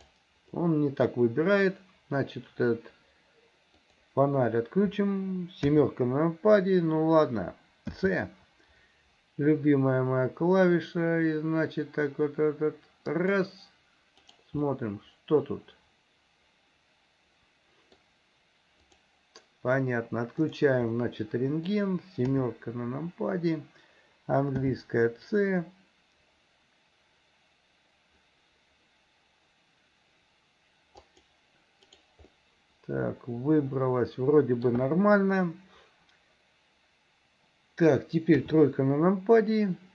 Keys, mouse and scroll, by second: 0.0 click, 0.6 middle click, 3.9 click, 5.7 KP_7, 7.9 c, 14.7-18.1 middle drag, 18.9 click, 20.5 click, 21.0 middle click, 22.3 KP_7, 24.6 c, 32.4-34.8 middle drag, 38.4 KP_3.